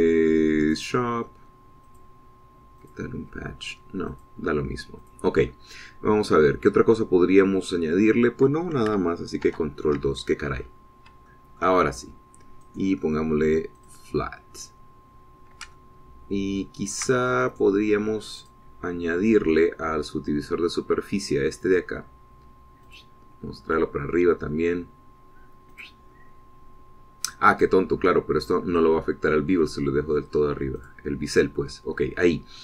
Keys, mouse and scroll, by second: 1.5 click, 2.7 click, 3.6 click, 5.0 click, 5.9 click, 10.3 ctrl+2, 11.5-11.9 scroll down 1, 12.2 shift+middle click, 12.8 shift+scroll up 1, 13.5 middle click, 14.6 middle click, 15.5-15.9 scroll up 1, 16.1 scroll down 2, 16.6-18.0 ctrl+drag, 18.4 ctrl+right click, 19.3 click, 21.4 scroll down 2, 23.7 right click, 26.6 click, 29.3-30.2 scroll up 2, 31.7 click.